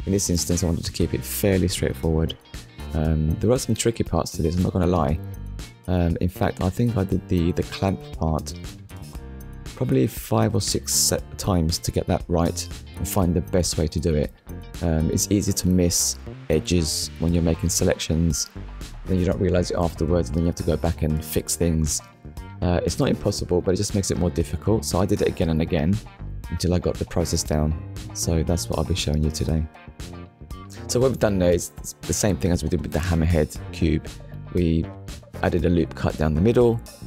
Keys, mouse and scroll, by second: 3.7 ctrl+r, 5.6 click, 6.5 right click, 7.9 click, 9.7 alt+click, 10.4 middle click, 11.6 shift+click, 12.2 middle click, 14.7 Delete, 15.7 click, 17.2 middle click, 17.8 Tab, 19.9 click, 21.1 click, 23.0 click, 24.2 middle click, 25.6 middle click, 28.1 Tab, 30.3 KP_1, 33.3 middle click.